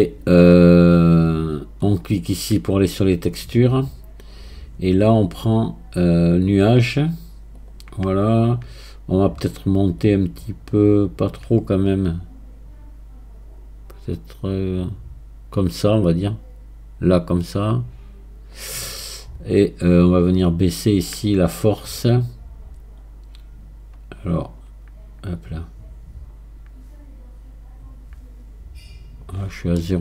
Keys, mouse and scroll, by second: 2.9 scroll down 2, 5.4 scroll up 4, 6.5-8.2 drag, 8.2 scroll down 2, 10.0-13.0 drag, 20.5-23.5 drag, 25.4-28.4 drag, 29.8-30.0 middle drag.